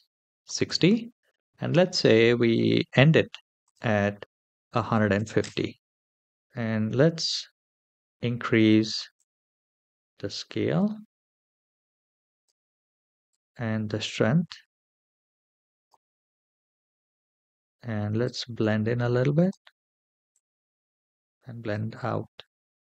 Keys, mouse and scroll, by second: 3.4-5.2 drag, 6.8-8.5 scroll up 2, 8.9-12.3 drag, 13.0-15.6 drag, 16.8-18.0 scroll down 3, 18.0-19.3 drag, 20.1-21.6 drag.